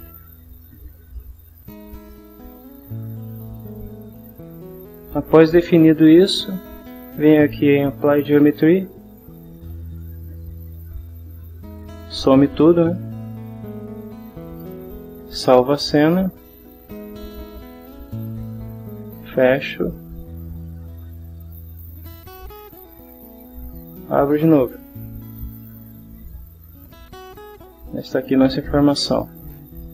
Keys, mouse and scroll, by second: 3.2-5.1 middle drag, 9.1 click, 11.9-12.9 middle drag, 14.5 click, 15.9 click, 17.7 click, 19.4 click, 21.2-21.9 drag, 22.6 click, 27.7-29.9 middle drag.